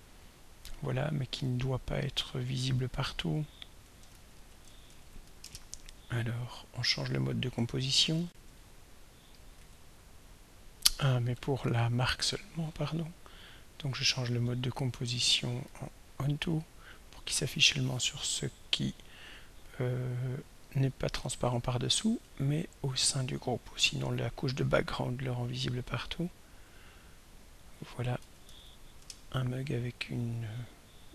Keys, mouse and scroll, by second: 3.0 click, 4.1 ctrl+a, 4.5-5.8 typing, 8.3 r, 9.6 Escape, 11.5 click, 12.2 click, 13.9 click, 15.0 click, 15.7 click, 17.0 click, 19.8 click, 21.1 shift+click, 21.8 shift+click, 25.3 click, 26.7 click, 27.3 click, 28.0-29.2 typing.